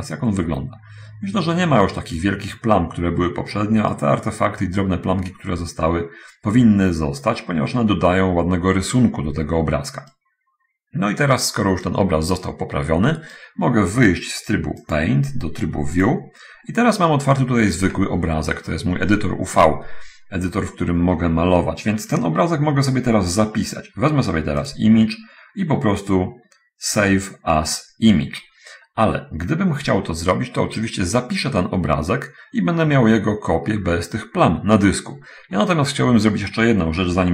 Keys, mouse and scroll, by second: 0.2-4.4 right drag, 10.5-12.4 right drag, 12.5-13.9 right drag, 15.2 click, 16.4 click, 17.7 middle click, 19.1 scroll up 1, 24.8 click.